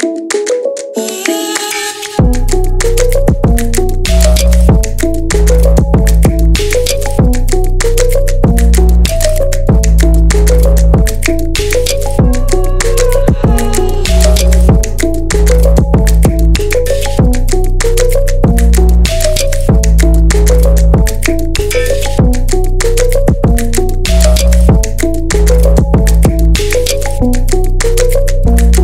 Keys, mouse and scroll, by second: 0.5-1.7 middle drag, 1.7 click, 2.4 ctrl+shift+click, 3.4 click, 5.1 middle click, 5.5 KP_1, 6.6-7.7 shift+middle drag, 7.7 click, 8.3 scroll down 1, 8.6-9.9 middle drag, 9.9 click, 10.6-12.0 middle drag, 12.0 click, 12.6-13.8 shift+middle drag, 13.8 ctrl+shift+click, 15.6 ctrl+shift+click, 16.8 KP_1, 17.6-20.4 shift+middle drag, 20.4 click, 20.6-23.7 drag.